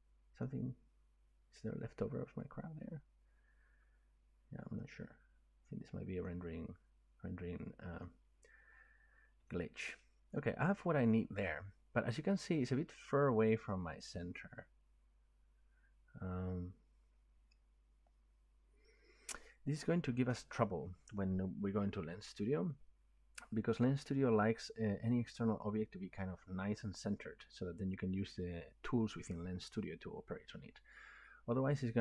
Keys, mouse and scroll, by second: 4.8 middle click, 5.6 scroll down 1, 8.1 middle click, 8.4 scroll up 1, 8.5 scroll down 1, 10.0 shift+middle click, 10.1 scroll, 12.4 middle click.